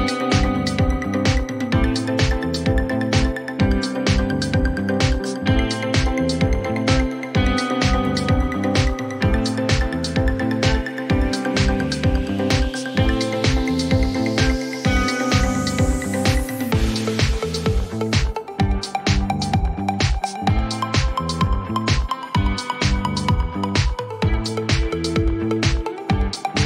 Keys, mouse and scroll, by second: 2.0 click, 2.3-3.6 typing, 6.3 click, 7.6 typing, 9.6 typing, 9.7 click, 9.9 click, 14.1 click, 15.4-16.1 typing, 17.2-19.2 typing, 21.6 click, 23.6 click, 25.1-25.7 typing.